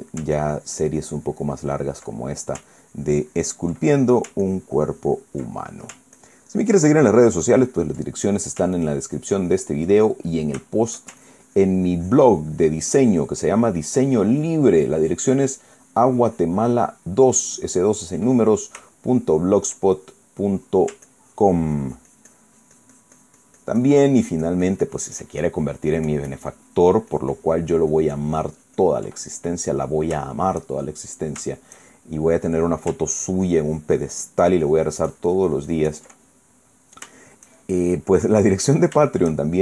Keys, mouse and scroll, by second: 0.1 ctrl+middle click, 1.1-3.3 ctrl+drag, 3.4 ctrl+click, 4.6 ctrl+middle click, 5.2 ctrl+click, 6.2 ctrl+middle click, 6.9-8.8 ctrl+drag, 8.8 ctrl+middle click, 9.5-10.6 ctrl+drag, 10.7 ctrl+middle click, 11.4 ctrl+shift+middle click, 11.9-15.4 ctrl+shift+drag, 15.5-19.0 ctrl+drag, 19.1 ctrl+middle click, 19.9 shift+middle click, 20.1 shift+middle click, 20.5-21.7 shift+middle drag, 21.8-29.8 ctrl+drag, 30.1 ctrl+middle click, 30.6 shift+middle click, 31.1 shift+middle click, 31.2-32.7 shift+drag, 32.7 shift+middle click, 33.8-36.9 ctrl+drag, 37.0 ctrl+click, 37.9 ctrl+shift+click, 38.6 shift+click, 39.1 click.